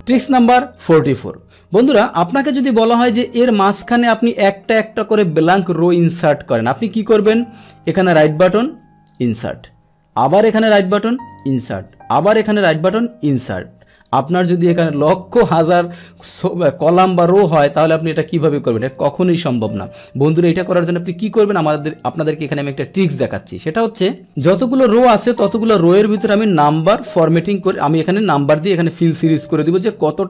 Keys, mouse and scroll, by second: 3.6-4.8 scroll down 1, 4.8-7.8 scroll down 1, 7.8 scroll down 1, 7.9 right click, 9.1 click, 10.2 right click, 11.3 click, 12.2 right click, 13.3 click, 13.9 click, 14.9 ctrl+z, 15.4 ctrl+z, 15.9 ctrl+z, 16.8 ctrl+z, 17.7 click, 21.2 click, 24.2 click, 24.9 click, 25.3 click, 26.1 click, 27.0 click, 27.6 click, 28.1 click, 28.7 click, 29.6-30.2 drag.